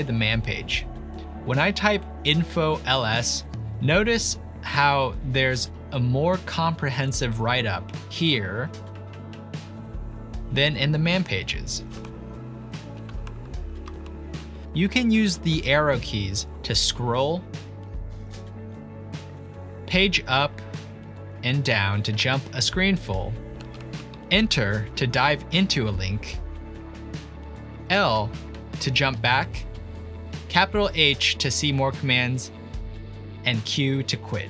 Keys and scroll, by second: 2.4 alt+1, 10.0 alt+2, 12.0 Down, 12.5 Down, 12.6 Down, 12.7 Down, 12.8 Down, 12.9 Down, 13.9 alt+1, 15.5 Down, 15.9 Down, 16.0 Down, 16.1 Down, 16.1 Down, 16.2 Right, 16.6 Right, 16.7 Right, 16.8 Right, 16.8 Right, 16.9 Right, 17.1 Down, 17.5 Down, 17.5 Down, 17.6 Down, 17.7 Down, 17.7 Down, 18.8 Up, 19.0 Up, 19.1 Up, 19.2 Up, 19.4 Up, 19.6 Up, 20.8 Page_Down, 21.5 Page_Up, 22.1 Up, 23.0 Right, 23.3 Right, 23.5 Right, 23.6 Up, 24.0 Right, 24.5 Up, 26.0 Return, 29.0 typing, 32.1 shift+h.